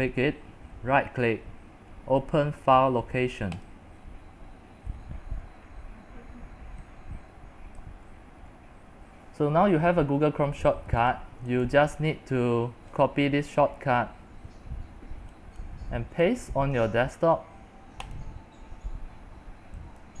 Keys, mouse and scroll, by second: 0.0-3.8 right drag, 3.8-7.9 drag, 8.0 click, 8.1-11.3 middle drag, 8.1-9.3 scroll down 10, 9.3 scroll up 1, 9.6-10.4 scroll down 1, 10.4-10.8 scroll down 1, 11.3-14.2 drag, 14.2-15.7 right drag, 15.7-20.2 drag.